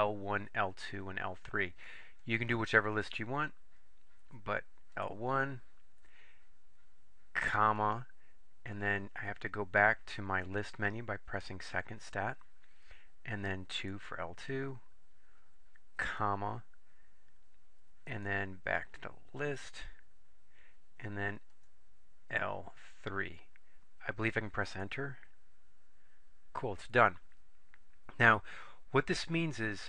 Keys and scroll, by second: 5.0 Return, 7.9 ,, 13.9 2, 16.2 ,, 21.7 3, 24.8 Return.